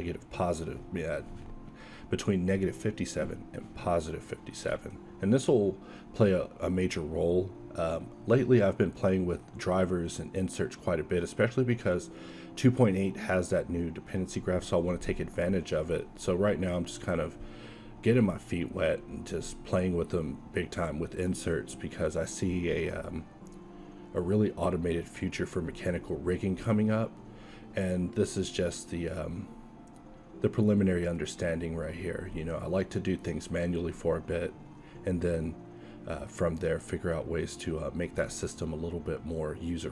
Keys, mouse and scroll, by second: 0.5 q, 1.5 q, 2.6 alt+a, 7.0 alt+a, 7.5 q, 16.3 q, 20.7 KP_1, 21.1 KP_5, 21.3 shift+c, 21.9 shift+a, 23.7 q, 25.9 alt+c, 27.2 ctrl+1, 28.1 alt+c, 29.0 z, 29.7 Tab, 30.9 ctrl+Tab, 31.6 Tab, 32.2 q, 34.5 z, 35.9 s, 36.7 drag, 37.0 Tab, 38.0 g, 39.7 x.